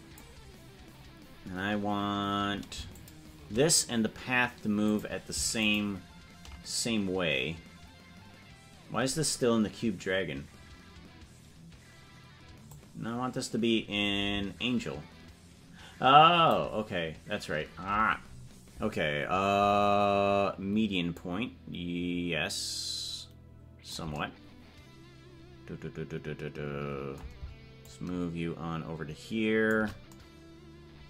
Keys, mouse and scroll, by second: 2.9 shift+click, 4.8 click, 5.6 ctrl+click, 12.7-17.1 drag, 21.1-24.5 drag, 27.8-29.7 shift+drag.